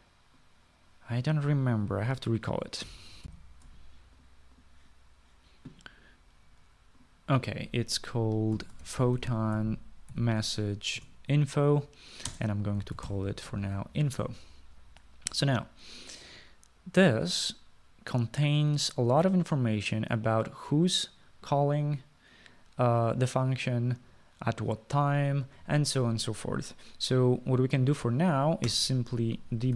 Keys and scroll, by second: 4.2-4.9 typing, 9.4-11.2 typing, 12.1 Return, 13.4-14.7 typing.